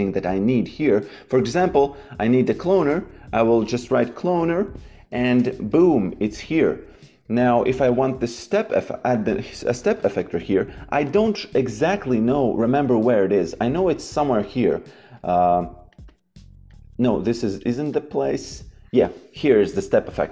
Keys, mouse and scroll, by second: 1.2 c, 2.4 BackSpace, 3.3 c, 5.0 Down, 5.3 Return, 5.3 KP_Enter, 6.3 click, 9.6 shift+c, 15.1 click.